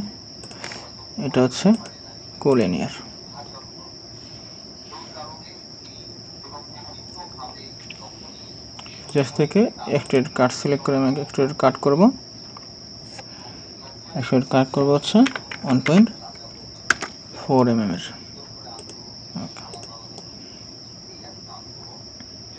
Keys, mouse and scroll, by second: 0.5 ctrl+click, 3.1 scroll up 1, 15.3-15.9 typing, 16.9 Return, 20.2 middle click.